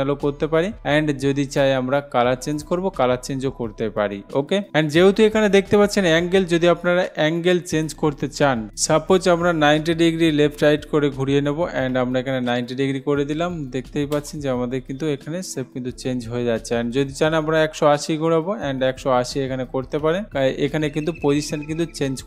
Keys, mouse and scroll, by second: 0.0 click, 1.8 click, 3.3 click, 7.3-8.3 drag, 11.6-12.0 typing, 14.4 Return, 16.8-17.8 drag, 18.7 1, 19.8-20.8 typing.